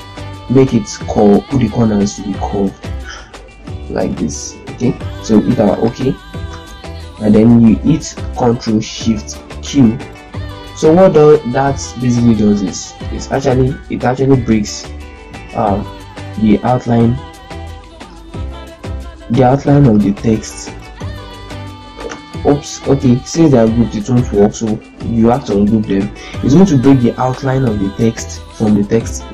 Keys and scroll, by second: 5.5 z, 6.2 ctrl+space, 9.3 ctrl+shift+q, 17.3 ctrl+z, 18.2 ctrl+shift+q, 21.9 ctrl+u.